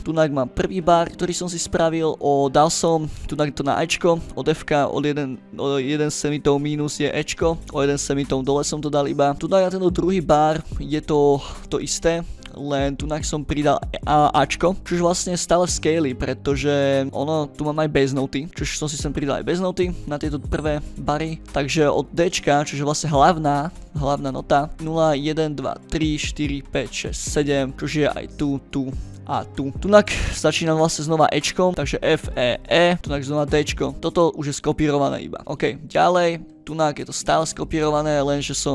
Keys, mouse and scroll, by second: 0.0 click, 0.7 click, 0.9 click, 1.6 click, 2.6-3.7 drag, 3.9 click, 4.6-7.2 drag, 7.3 click, 7.6 click, 8.4 click, 9.0 scroll down 2, 9.3-10.4 drag, 10.6 scroll up 1, 11.2 click, 11.4 click, 11.8 scroll down 2, 12.3 click, 12.5-14.4 drag, 14.6 scroll down 2, 14.8-15.2 scroll up 4, 15.4-17.0 scroll down 2, 17.1 click, 18.5 click, 18.8 scroll down 2, 19.2 click, 19.8 scroll up 2, 21.3 ctrl+scroll down 2, 21.4 ctrl+middle click, 21.4 ctrl+scroll, 21.8 click, 21.9-23.6 drag, 23.8 drag, 24.3 middle click, 24.3 scroll up 2, 24.7 click, 27.8 click, 28.3 drag, 29.1 drag, 29.9 click, 30.6-31.6 drag, 31.7 click, 32.0 click, 32.4 click, 33.0 click, 33.8 ctrl+scroll down 2, 33.9 click, 35.5 scroll down 2, 35.8 ctrl+scroll up 2, 36.4 scroll up 2, 36.8 click, 37.5 click, 38.3 click.